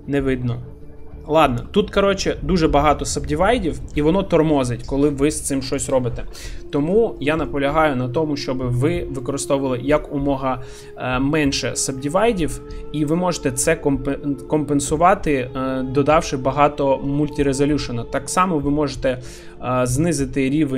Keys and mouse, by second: 0.8 Tab, 1.5 middle click, 3.7 shift+middle click, 5.8 click, 7.2 middle click, 8.6 Tab, 8.9 middle click, 12.6 Tab, 18.2 shift+middle click.